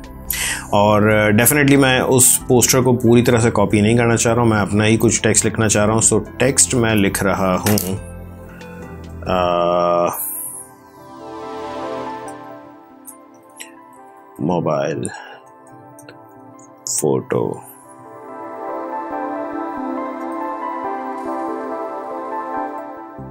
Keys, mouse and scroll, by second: 4.6 click, 11.9 shift+p, 12.9-16.9 typing, 15.1 Return, 19.7 Return, 19.9-23.3 typing.